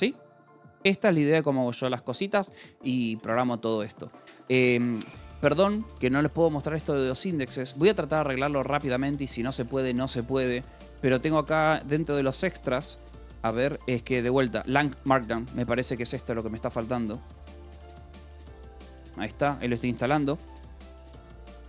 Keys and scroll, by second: 6.0 shift+l, 7.3 Escape, 8.2-9.8 typing, 8.6 Tab, 9.8 Tab, 10.8 Return, 11.8 j, 14.4 k, 15.8 c, 17.9 Escape, 18.3-21.6 typing.